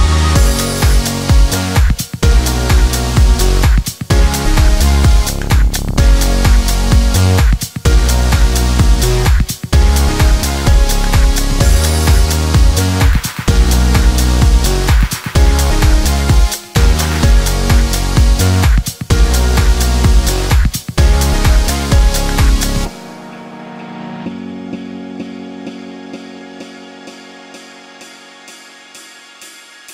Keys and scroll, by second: 8.2 1.